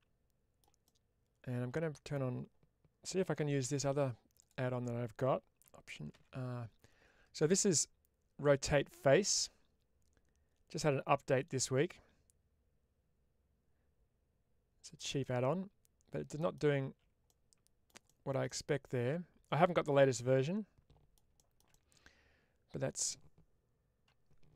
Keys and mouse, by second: 0.8-2.0 middle drag, 14.7 click, 15.2-16.4 middle drag, 16.7 ctrl+z, 17.3 middle click, 18.4-21.0 middle drag, 21.7-23.0 middle drag.